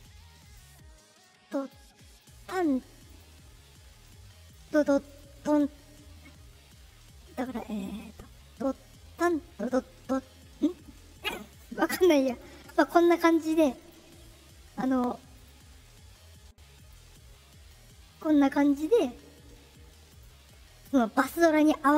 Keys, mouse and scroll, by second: 0.4 click, 1.1 click, 2.0 right click, 3.0 click, 4.0 click, 5.0 click, 7.2 click, 8.6 click, 13.7 click, 15.3 click, 16.7 right click, 17.6-18.7 drag, 20.0 click.